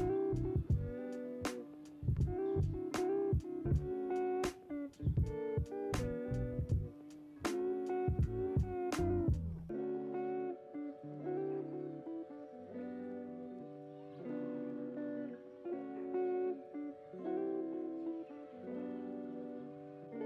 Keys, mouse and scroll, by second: 1.4-3.7 middle drag, 3.7 click, 6.8 middle click, 7.1 click, 11.2 click, 14.2 click, 14.5 middle click, 15.4-15.9 scroll down 2, 15.9 middle click, 16.8 scroll up 2, 17.4 shift+middle click, 17.7-18.7 scroll up 1, 18.7-20.2 shift+middle drag.